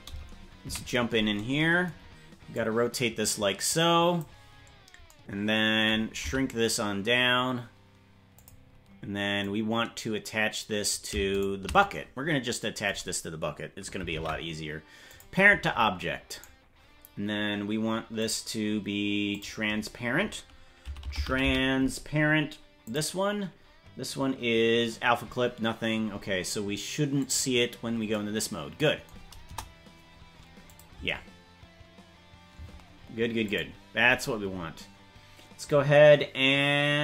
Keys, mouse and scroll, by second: 0.6 KP_Decimal, 2.5-4.2 drag, 6.2 s, 9.3-10.9 drag, 11.4 shift+right click, 14.2 ctrl+p, 16.4 right click, 18.1 click, 19.3-23.0 drag, 27.3 click, 29.5 KP_0, 30.6 click, 30.9 space, 32.7 space, 33.4 click.